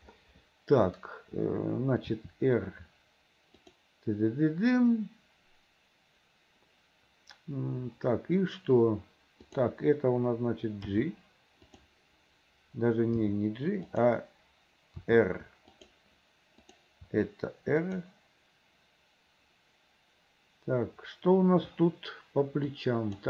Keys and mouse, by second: 2.2 r, 11.0 g, 13.3 g, 15.1 r, 16.8 click, 17.1 r, 23.0 click.